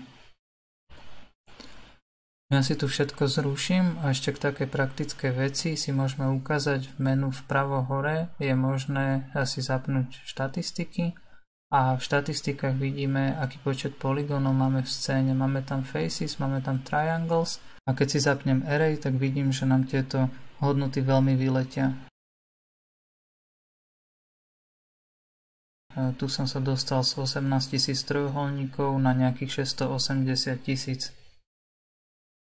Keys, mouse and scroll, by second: 0.1 KP_Decimal, 1.8 click, 2.2 click, 2.7 click, 4.0 click, 5.2 KP_Decimal, 5.8-7.5 middle drag, 7.5 F9, 12.2-15.2 drag, 23.1 click, 31.3 click.